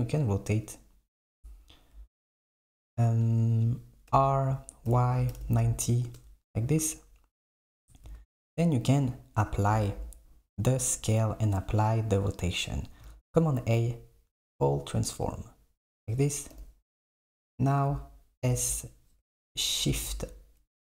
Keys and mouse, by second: 4.1 r, 8.2 a, 13.2 a, 16.6 KP_7, 18.5 s.